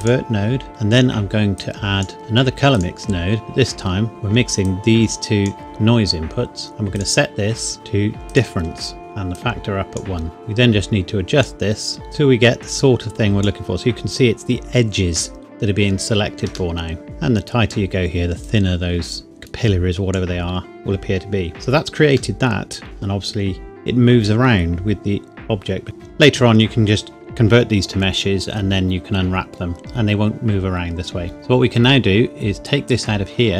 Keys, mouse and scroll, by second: 0.0 click, 1.6 click, 2.2 shift+d, 2.7 click, 4.6 click, 6.9 click, 8.3 click, 9.3 click, 14.2-14.6 scroll up 1, 16.7 middle click, 17.0 click, 20.8-21.2 scroll down 1, 22.4 middle click, 22.8 space, 25.8 click, 31.3 shift+Num_Lock, 31.3-31.6 scroll down 1, 31.6 shift+middle click, 32.8 click.